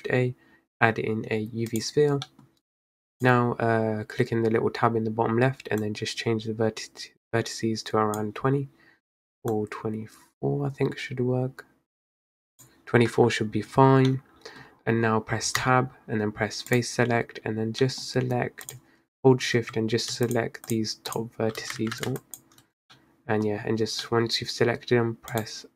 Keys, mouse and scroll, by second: 2.2-3.2 scroll up 4, 2.4 middle click, 3.3-8.9 drag, 9.6-12.7 drag, 14.2-14.7 middle drag, 14.7-15.8 scroll up 1, 15.8 Tab, 16.8-17.9 drag, 17.9 middle click, 18.1-18.7 scroll up 1, 18.7 click, 20.3 alt+shift+click, 20.8 alt+shift+click, 21.2 alt+shift+click, 21.8 ctrl+z, 22.2 shift+click, 23.0-25.4 middle drag, 25.4-25.7 right drag.